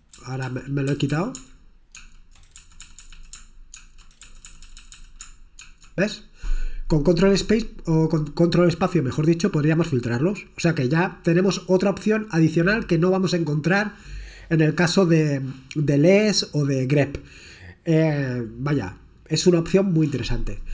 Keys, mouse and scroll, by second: 0.3-1.2 typing, 2.0 ctrl+space, 2.7 Down, 2.9 Down, 3.0 Down, 3.1 Down, 3.8 ctrl+space, 4.3 Down, 4.5 Down, 4.7 Down, 4.8 Down, 5.0 Down, 5.6 ctrl+space, 12.2-13.9 scroll down 3, 15.3-15.8 scroll down 4, 17.6-19.0 scroll down 4.